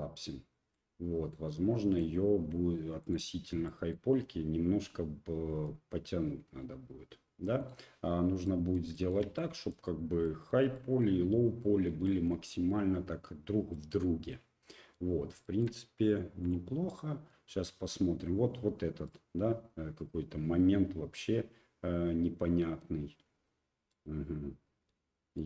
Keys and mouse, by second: 1.3 right click, 3.0 click, 3.6 middle click, 5.5 g, 8.4 middle click, 8.9 shift+middle click, 9.3 middle click, 10.2 shift+middle click, 10.7 middle click, 11.6 middle click, 12.0 shift+middle click, 12.4 middle click, 13.7-14.9 middle drag, 15.4 shift+middle click, 16.4 click, 16.9 middle click, 17.9 middle click, 19.0-22.8 middle drag, 23.9-24.9 middle drag, 25.3 right click.